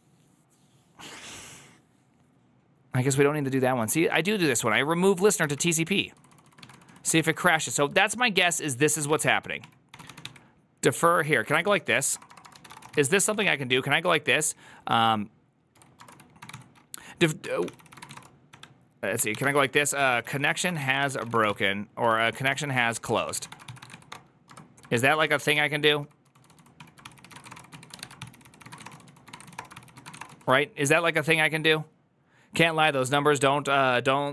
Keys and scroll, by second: 4.8 typing, 6.0-7.7 typing, 8.4 ctrl+c, 8.9-13.9 typing, 15.4-30.7 typing, 17.3 Tab, 17.5 ctrl+c.